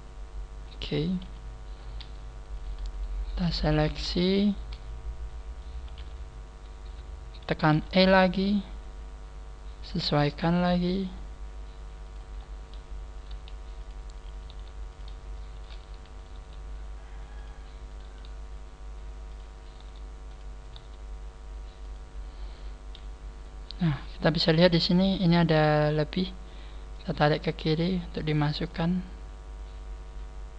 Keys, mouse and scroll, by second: 1.0-1.5 scroll down 3, 1.1 click, 1.1 z, 1.2 KP_3, 1.7 scroll up 3, 2.5 right click, 2.9 shift+right click, 3.2 shift+right click, 3.7 shift+right click, 3.8 shift+right click, 4.5 shift+right click, 4.7 middle click, 5.9 KP_3, 6.5 scroll down 1, 7.9 e, 12.3-12.7 scroll up 5, 13.3 g, 14.3 right click, 14.5 g, 14.9 click, 15.3 shift+middle click, 16.1 right click, 16.3 g, 17.9 click, 17.9 right click, 18.0 g, 19.6 click, 19.6 right click, 19.7 g, 20.3 click, 20.6 right click, 22.1 scroll down 4, 23.8-24.9 scroll up 7, 25.5 click, 26.5 right click, 26.9 click, 28.3 click, 28.3 right click, 28.7 right click, 28.7 click, 30.2 click.